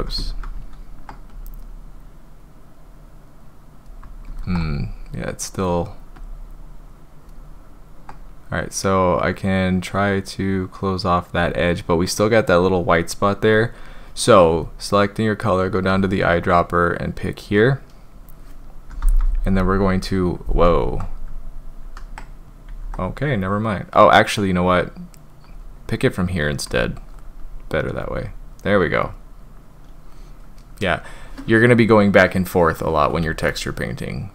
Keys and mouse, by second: 0.2 ctrl+z, 0.5 ctrl+z, 1.3-3.9 drag, 4.3 ctrl+z, 5.4 click, 6.2-7.3 drag, 8.3-11.4 drag, 18.9 [, 19.1 [, 19.2 [, 19.4 [, 19.5 click, 21.8 ctrl+z, 22.6 ctrl+z, 24.6 click, 28.0 click, 28.5 click, 29.0 click, 33.5-34.3 middle drag.